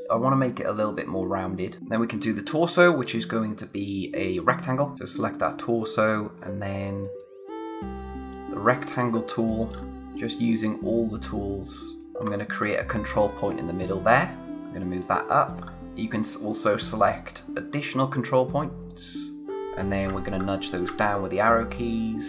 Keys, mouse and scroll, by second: 1.8 space, 3.0 click, 3.3 space, 4.9 click, 6.0-7.2 scroll up 1, 7.2 click, 8.8-9.1 scroll down 1, 9.1 space, 9.3 click, 9.6 space, 10.0 click, 12.3-13.0 scroll down 1, 13.3 click, 15.6 scroll up 1, 15.8 click, 20.8 click.